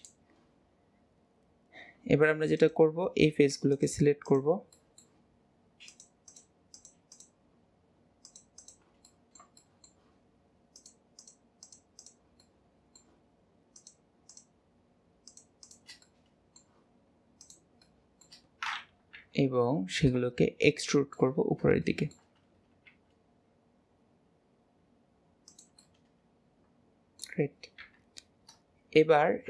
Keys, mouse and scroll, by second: 2.6 click, 3.8 shift+click, 4.3 shift+click, 4.8-5.9 shift+middle drag, 5.9 shift+click, 6.3 shift+click, 6.8 shift+click, 7.2 shift+click, 8.3 shift+click, 9.1-10.8 middle drag, 10.8 shift+click, 11.2 shift+click, 11.7 shift+click, 12.0 shift+click, 12.5-13.8 shift+middle drag, 13.8 shift+click, 14.3 shift+click, 15.3 shift+click, 15.7 shift+click, 16.1-17.4 middle drag, 17.4 shift+click, 17.9-19.2 shift+middle drag, 19.2 KP_1, 20.7-22.9 shift+middle drag, 22.9 e, 25.8-27.9 middle drag, 27.9 KP_1.